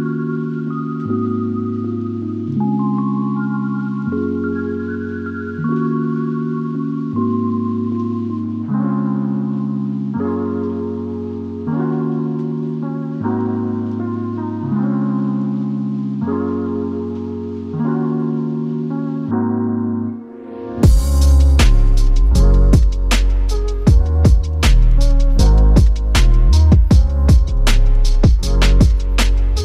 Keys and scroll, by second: 2.6 super+y, 18.9 super+a.